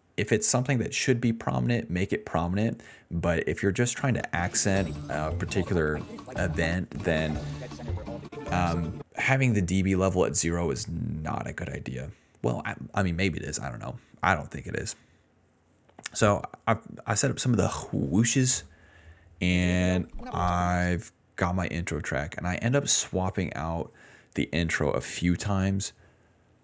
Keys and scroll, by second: 2.7-4.5 typing, 7.3 d, 9.0-12.7 typing, 19.4 space, 19.8 s, 20.9 space.